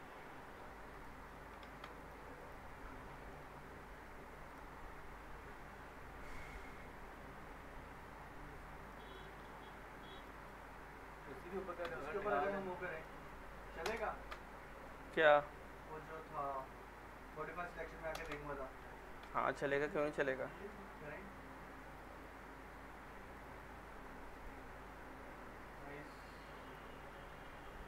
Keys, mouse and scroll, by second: 0.9 click, 1.6 ctrl+z, 2.0 click, 3.1 alt+middle click, 4.5 click, 7.7 scroll up 1, 8.9 click, 10.2 ctrl+click, 11.9 middle click, 12.9 ctrl+click, 13.9 ctrl+BackSpace, 14.9 alt+middle click, 16.3 click, 17.2 ctrl+click, 18.2 ctrl+BackSpace, 19.3-20.8 middle drag, 21.9 click, 24.9-26.5 alt+middle drag, 26.7 click.